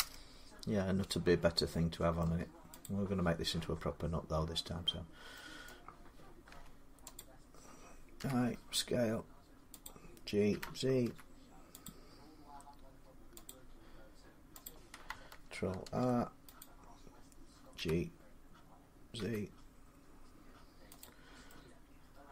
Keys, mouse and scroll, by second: 2.0 middle click, 2.6 click, 4.2 6, 5.5 middle click, 6.3 Tab, 7.0 click, 8.0 i, 9.6 click, 10.3-10.8 typing, 13.1 z, 13.3 click, 14.4 click, 15.6 ctrl+r, 16.4 click, 17.5 g, 19.0 z, 20.8 click, 22.2 middle click.